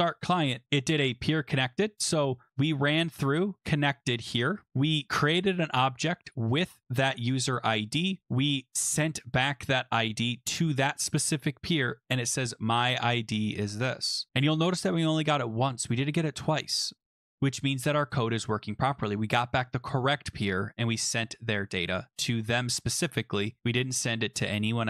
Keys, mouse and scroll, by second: 0.6 click, 2.5 click, 2.9 click, 3.3 click, 4.7 click, 6.0 click, 10.6 click, 14.1 click, 14.3-15.0 scroll down 6, 21.9 click, 23.2 click.